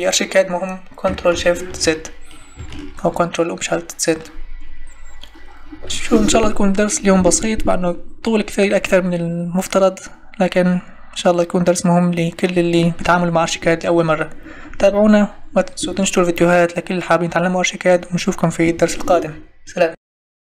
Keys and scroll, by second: 1.8 ctrl+shift+z.